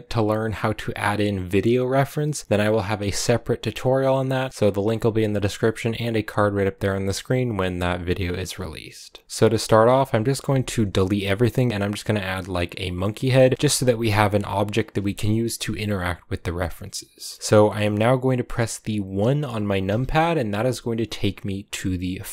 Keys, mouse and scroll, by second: 9.4-10.7 middle drag, 10.7 a, 12.3 shift+a, 13.3-19.7 middle drag, 19.7 KP_1, 21.9 click.